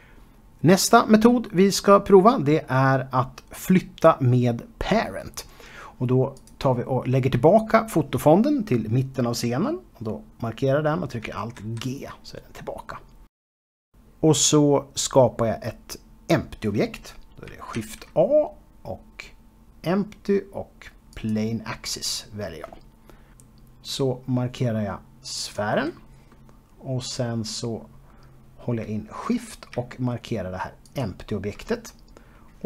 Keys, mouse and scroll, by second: 7.0 click, 12.2 alt+g, 13.0-13.4 scroll down 1, 13.9-15.5 scroll up 1, 18.8 shift+a, 22.5 click, 26.5 click, 27.3 middle click, 28.8-29.9 scroll up 2, 29.9 middle click, 31.9 shift+click.